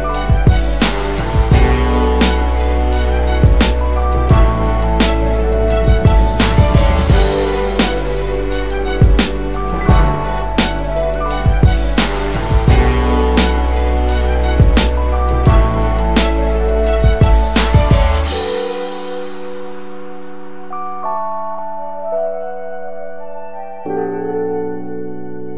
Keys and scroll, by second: 20.3 BackSpace, 22.6 ctrl+space, 23.1-24.6 ctrl+space, 24.6-25.0 space.